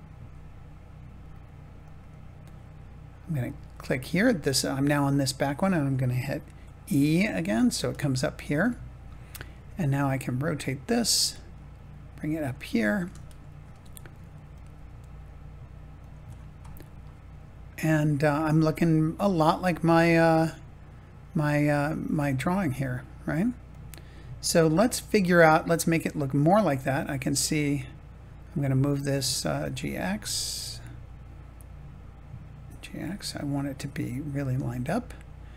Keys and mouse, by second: 1.8 click, 6.5 e, 7.8 click, 8.6 shift+middle click, 9.6 r, 10.6 click, 10.8 g, 13.2 shift+middle click, 13.8 r, 14.5 click, 14.7 g, 15.9 click, 20.0 g, 22.5 r, 23.6-25.5 drag, 27.5 click, 29.5 g, 29.7 x, 32.6 g, 32.9 x.